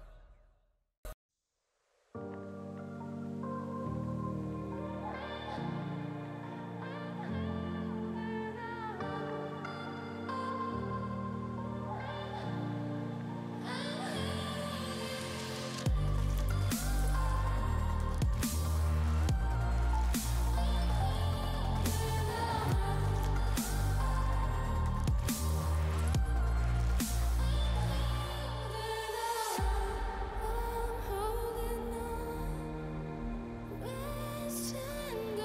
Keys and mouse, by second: 1.8 click, 3.2 click, 4.2 click, 6.0 click, 6.3 click, 6.6 click, 7.3 click, 8.1 click, 9.0 click, 9.6 click, 10.1 click, 11.0 click, 13.3 click, 14.3 click, 15.9 click, 16.8 click, 17.7 click, 18.2 click, 18.4 click, 18.7 click, 19.5 click, 20.2 click, 21.0 space, 21.4 alt+click, 23.1 click, 23.9 click, 24.9 click, 26.2 alt+click, 27.2 click, 27.7 click, 28.2 click, 28.7 click, 30.2 click, 31.2 space, 31.3 click, 31.6 click, 34.4 alt+click.